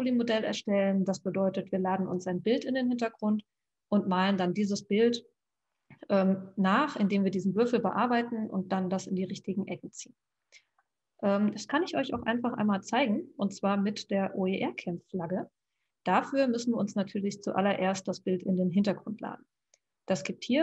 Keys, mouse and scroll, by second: 7.0 click.